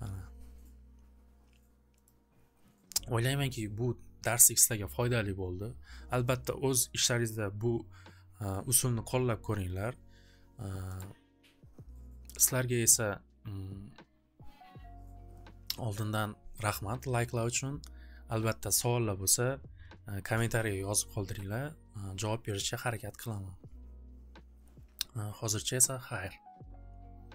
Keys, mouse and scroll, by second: 2.1 click, 10.9-15.2 drag, 15.7 click.